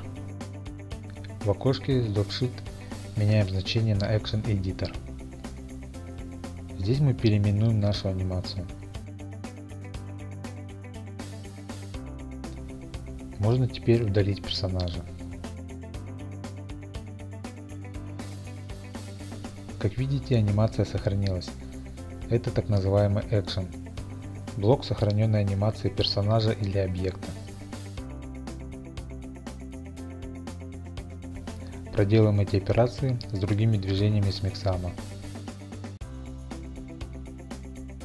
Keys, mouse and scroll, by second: 0.0-1.2 drag, 1.8-2.9 drag, 3.4 click, 5.6 click, 7.8 BackSpace, 9.0-10.5 typing, 11.6 Return, 13.3-14.4 scroll, 14.5 click, 15.9 click, 16.8 click, 17.6 x, 18.6 click, 22.8 click, 31.3 click, 31.6 click, 32.1 click, 32.6 click, 33.1 click, 33.7 click, 34.7 click, 35.2-38.0 typing, 35.6 click, 37.1 Return.